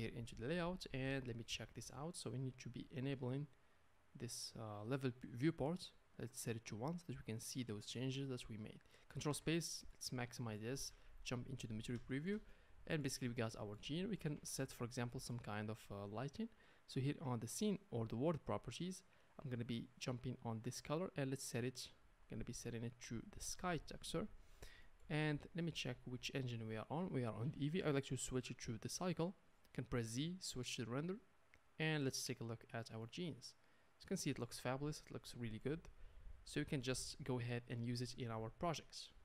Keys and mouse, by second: 0.0 click, 0.1-3.3 middle drag, 3.3 click, 3.5-6.8 middle drag, 6.8-18.5 drag, 9.3 ctrl+space, 10.9 z, 14.5 ctrl+space, 18.5-22.0 middle drag, 22.0-26.2 drag, 26.2-27.8 middle drag, 27.8-32.6 drag, 29.9 z, 32.6-39.2 middle drag.